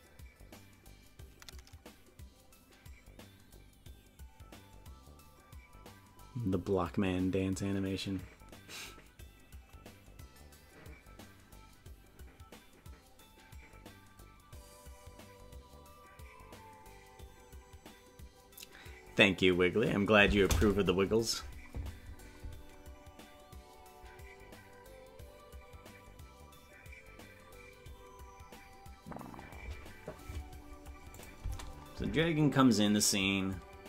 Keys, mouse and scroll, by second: 31.2 click, 31.4 space.